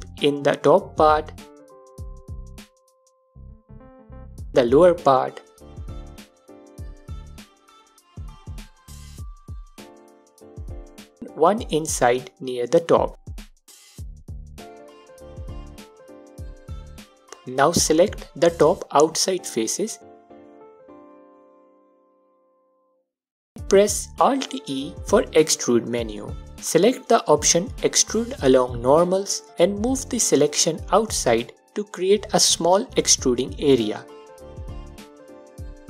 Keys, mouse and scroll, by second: 8.9-14.0 alt+drag, 10.4 ctrl+e, 13.9 ctrl+r, 14.3-15.4 scroll down 2, 15.4-15.8 scroll down 1, 16.7 3, 17.0 scroll up 1, 17.5-18.5 alt+drag, 20.1 alt+shift+click, 21.3 click, 21.9 alt+shift+click, 23.1-26.6 alt+drag, 23.8-26.0 scroll up 2, 26.5 scroll up 1, 27.9 alt+e, 27.9-30.5 drag, 31.6-34.6 drag, 34.1 ctrl+r.